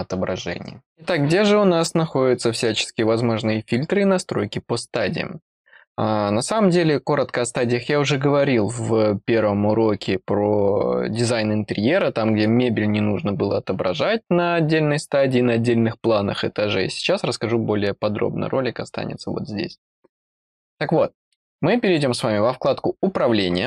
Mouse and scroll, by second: 21.8 click.